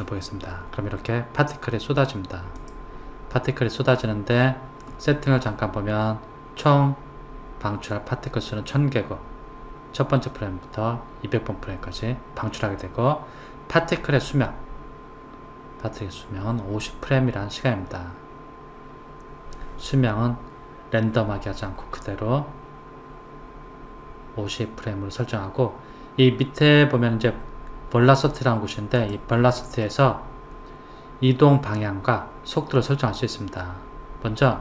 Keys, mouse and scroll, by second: 2.6 click, 24.9-26.6 scroll down 2, 29.0 click.